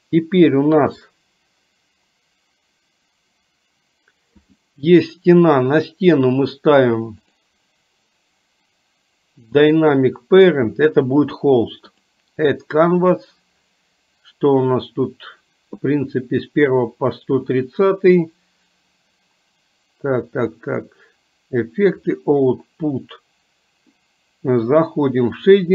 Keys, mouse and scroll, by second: 4.5 click, 7.4 click, 10.0 click, 12.0 click.